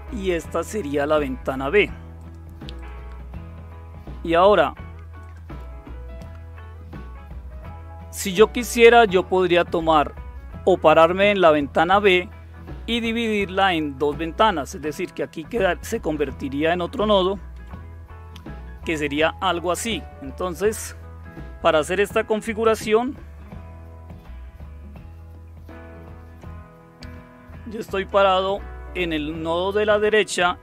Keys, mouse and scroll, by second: 0.1 click, 2.2 click, 2.8 click, 5.2 click, 17.5 Tab, 25.9 super+7, 27.9 click.